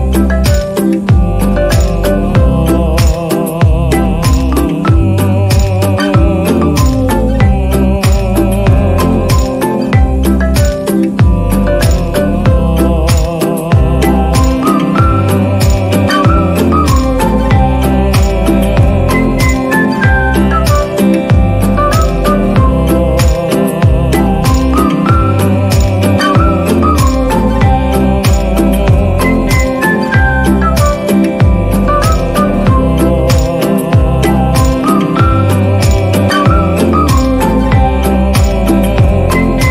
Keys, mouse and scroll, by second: 0.8 right click, 3.9 right click, 5.1 right click, 5.5 right click, 6.4 right click, 6.6 ctrl+-, 6.7 right click, 6.8 ctrl+=, 7.9 right click, 8.1 right click, 8.8 right click, 9.5 right click, 15.4 right click, 20.3 right click, 24.4 ctrl+-, 30.3 ctrl+=, 31.7 ctrl+=, 32.5 right click, 32.9 right click, 33.9 right click, 34.4 ctrl+-, 35.1 ctrl+-, 35.3 right click, 35.5 right click, 35.6 ctrl+=, 35.6 ctrl+-, 36.0 right click, 38.9 right click, 39.1 right click.